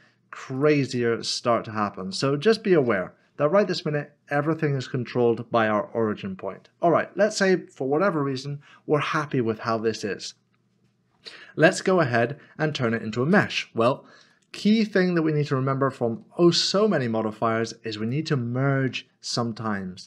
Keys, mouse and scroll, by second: 0.6 click, 1.2 middle click, 2.8 ctrl+z, 4.4 middle click, 10.0 middle click, 14.2 middle click, 15.0 scroll up 1, 15.5 shift+middle click, 18.0 click.